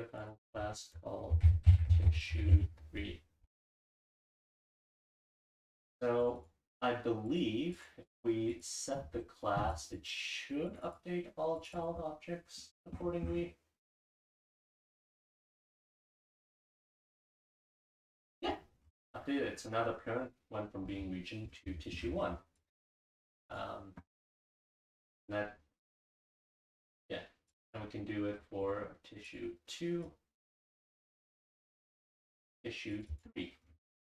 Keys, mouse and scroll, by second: 6.2 click, 7.3 click, 7.7 click, 8.5 click, 9.7 click, 9.9 click, 10.7 click, 11.6 click, 11.9 click, 12.6-13.9 scroll up 2, 13.9 click, 13.9-15.3 scroll up 1, 15.3 click, 15.3-16.3 scroll up 1, 15.5 click, 16.3-18.8 scroll up 1, 18.8-21.5 scroll down 2, 21.5-22.6 scroll down 1, 22.6 click, 22.6-24.3 scroll down 1, 23.3 click, 23.5 click, 24.3-25.7 scroll down 1, 24.7 click, 25.7-27.0 scroll down 1, 26.1 click, 26.4 click, 27.0-34.2 scroll down 1, 27.5 click, 27.7 click, 28.6 click, 29.3 click, 30.1-30.4 drag, 30.9 click, 31.2 click, 31.9 click, 32.3 click, 32.9 click, 33.1 click, 33.9 click.